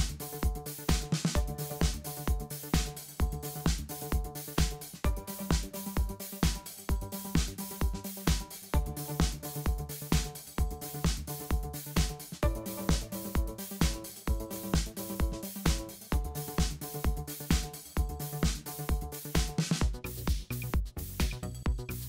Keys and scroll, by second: 5.6-6.4 typing, 8.3 super+c, 8.9 super+f, 9.2 super+7, 10.7 super+a, 11.3 super+c, 11.8 super+f, 12.5 super+7, 12.7 super+7, 12.9 super+7, 13.4 super+7, 14.0 super+7, 14.3 super+7, 15.1 super+7, 16.0 super+7, 17.1 super+8, 17.5 super+z, 18.4 BackSpace, 18.9 super+7, 19.9 super+7, 20.5 super+7, 21.0 super+7, 21.8 super+7.